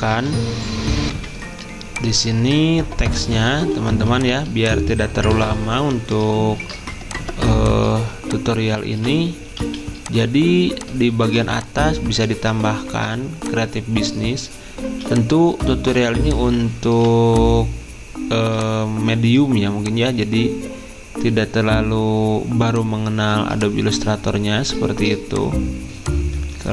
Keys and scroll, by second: 2.4 F10, 3.9 z, 6.1-6.8 typing, 11.0-13.0 typing, 14.7-15.7 typing, 23.2 z.